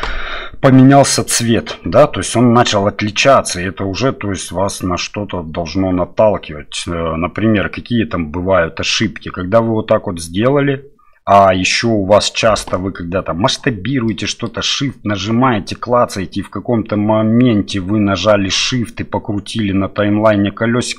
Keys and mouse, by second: 14.1 shift+middle click.